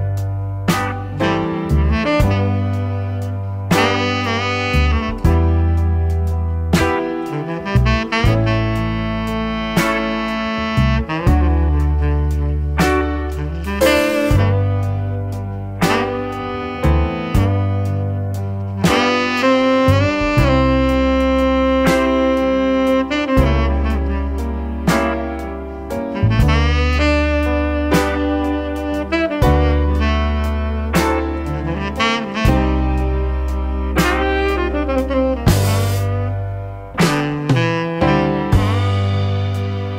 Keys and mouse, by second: 1.2-1.9 drag, 3.5 click, 5.0 click, 6.6-7.8 drag, 8.8-10.2 drag, 11.2 click, 12.5-16.0 drag, 16.5-18.1 drag, 20.4-21.8 drag, 24.3-25.2 shift+drag, 25.8-26.2 drag, 26.6 shift+click, 27.7 click, 28.4 ctrl+t, 30.4-31.6 drag, 32.4-33.5 drag, 35.2 click, 35.6-36.0 middle drag, 36.3 middle click, 37.2-37.9 middle drag, 38.4-39.9 shift+drag.